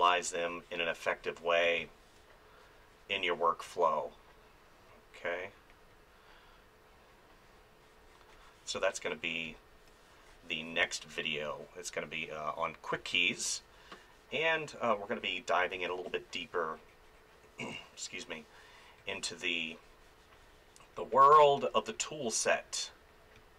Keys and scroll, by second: 1.6 space, 8.7 space, 10.8 space, 12.9 space, 15.7 space.